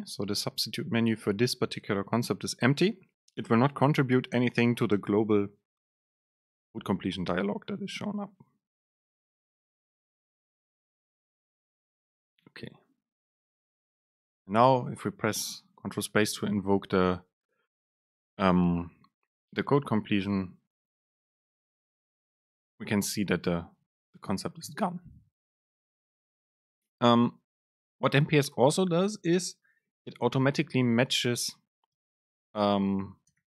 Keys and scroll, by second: 14.3 super+space.